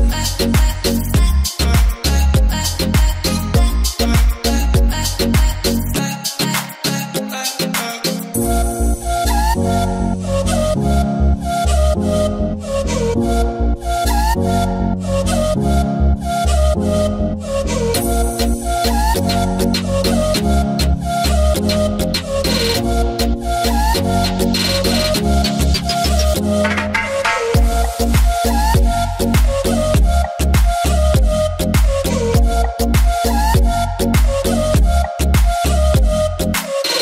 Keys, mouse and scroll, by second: 5.2 alt+scroll up 1, 6.6 alt+scroll down 1, 7.1 click, 7.6-8.0 ctrl+scroll down 1, 8.6 click, 9.0-10.0 ctrl+scroll down 2, 10.2 click, 11.0-11.7 alt+scroll up 1, 12.0-12.6 scroll down 1, 12.6-15.2 drag, 17.5 right click, 20.2 click, 22.2 click, 25.6 right click, 31.1-37.0 alt+drag.